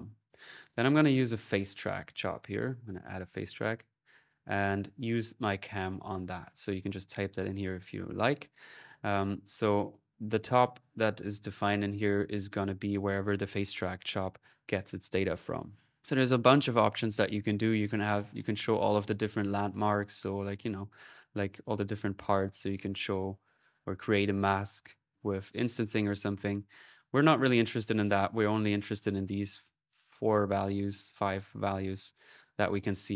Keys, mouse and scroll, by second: 0.0-2.0 typing, 2.9-4.5 drag, 3.2 middle click, 6.5 click, 9.2-10.5 drag, 11.2 click, 12.2 middle click, 18.1-19.3 drag, 19.3 middle click, 20.5-21.8 middle drag, 22.0-23.3 drag, 26.5 click, 27.4 middle click, 31.9 click.